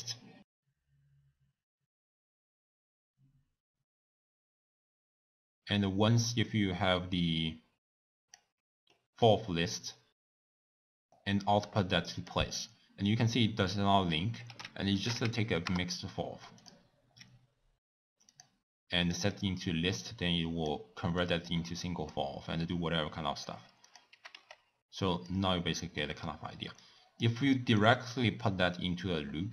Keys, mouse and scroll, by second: 1.5 click, 3.3 w, 8.5 click, 15.8 ctrl+a, 19.5 click, 20.8 click, 22.2 click, 23.9 click, 24.1 g, 26.8 drag.